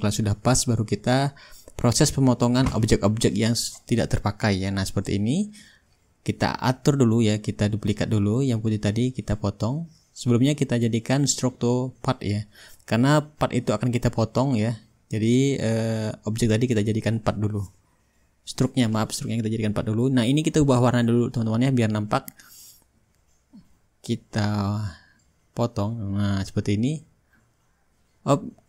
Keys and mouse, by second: 2.1-3.3 drag, 6.0-7.1 drag, 7.1 click, 9.6-10.7 drag, 10.9-12.0 drag, 13.8-15.9 drag, 16.1-18.8 drag, 18.9-20.1 drag, 23.3-24.4 shift+drag, 25.0-28.0 drag, 27.9 ctrl+z.